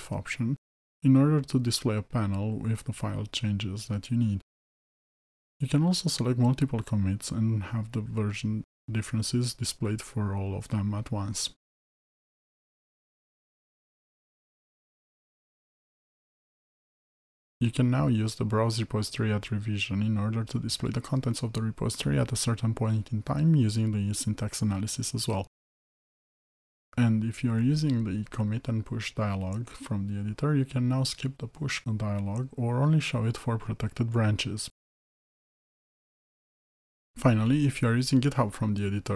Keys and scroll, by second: 26.6 ctrl+alt+s.